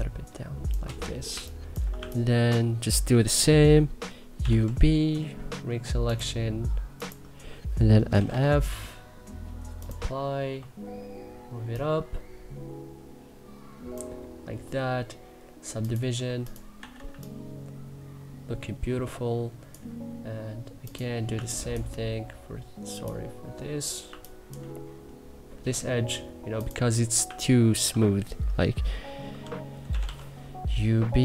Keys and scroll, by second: 0.9 3, 3.8-4.7 typing, 7.5-8.4 typing, 16.4 e, 16.7 3, 21.0 2, 24.3 1, 26.9 2, 29.3-30.2 typing.